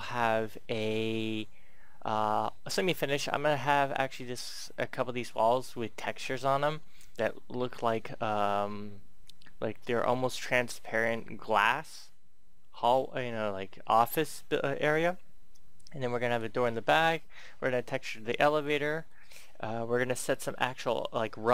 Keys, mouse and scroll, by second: 2.6-18.2 middle drag.